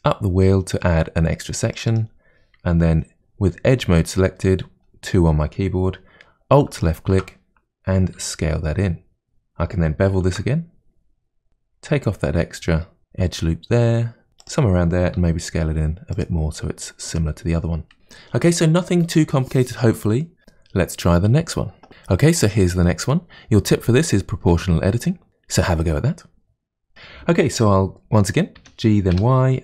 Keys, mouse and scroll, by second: 1.9 click, 3.7 2, 6.7 alt+click, 8.2 s, 9.4-10.2 scroll up 3, 10.2 ctrl+b, 15.2 s, 16.6-17.0 scroll down 2, 17.0 Tab, 17.5-18.6 scroll down 2, 18.6-19.9 scroll down 1, 28.6 g.